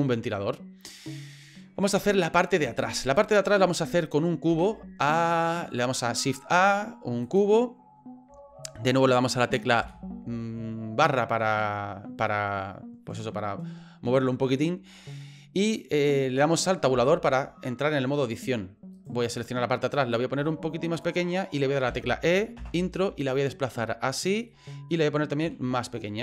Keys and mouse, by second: 2.7 shift+middle click, 4.5 shift+a, 9.8 KP_Divide, 11.6 middle click, 14.6 middle click, 16.9 Tab, 18.2 middle click, 18.9 right click, 20.4 s, 21.9 e, 23.2 click, 24.5 middle click, 25.4 s.